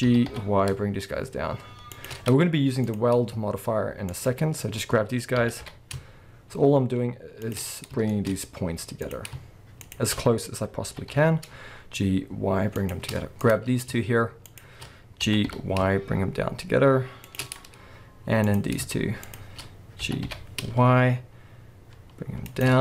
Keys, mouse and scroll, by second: 0.0 g, 2.1 shift+click, 2.9 click, 4.1 shift+click, 5.3 g, 7.5 shift+click, 7.7-8.1 scroll down 1, 8.1-9.0 shift+middle drag, 8.3-9.0 scroll up 1, 9.0 click, 9.8 shift+click, 10.2-10.6 scroll up 1, 10.8 g, 12.9 shift+click, 13.4 click, 14.5 shift+click, 15.2 g, 17.4 shift+click, 17.5-17.9 scroll down 1, 17.9-18.5 scroll up 1, 18.5 click, 19.2 shift+click, 20.0 g, 22.6 shift+click.